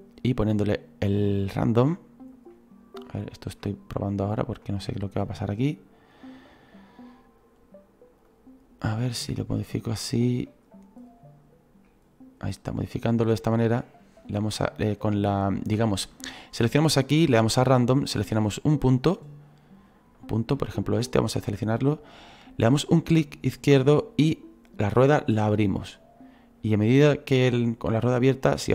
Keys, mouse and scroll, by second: 2.5-5.0 middle drag, 5.0-8.3 right drag, 8.3-12.4 drag, 18.3-20.8 middle drag, 20.8-22.7 right drag, 22.7-25.7 drag.